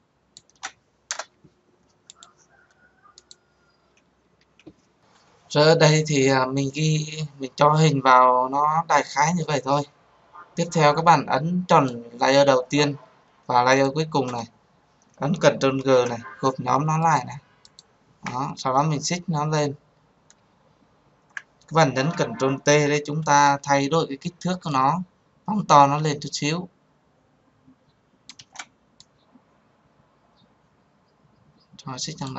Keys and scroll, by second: 1.7 Return, 15.8 ctrl+g, 22.4 ctrl+t.